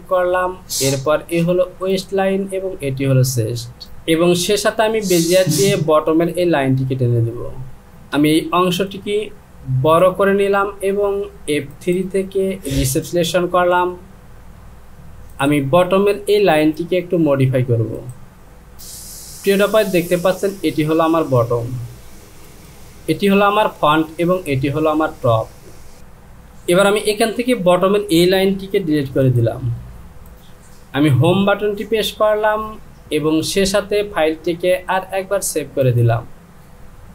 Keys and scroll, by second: 8.2 Return, 29.1 Delete, 31.3 Home.